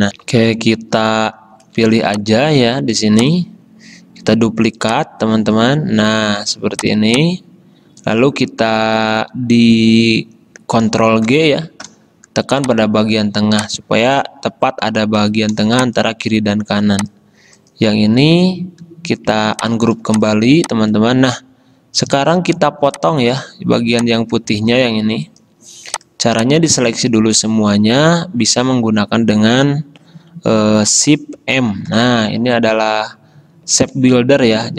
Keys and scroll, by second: 0.2 F10, 2.1 space, 11.4 ctrl+g, 15.7 space, 24.7 ctrl+z, 31.8 shift+m.